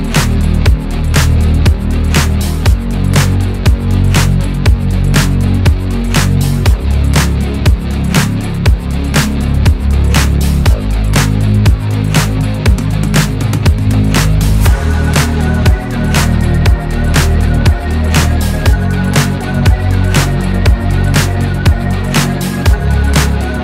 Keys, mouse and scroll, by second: 1.3 click, 4.8 click, 6.0 shift+p, 6.4 o, 10.1 Caps_Lock, 10.5-15.9 typing, 16.8 Caps_Lock, 18.7 click, 21.6 Caps_Lock, 21.9-23.6 typing.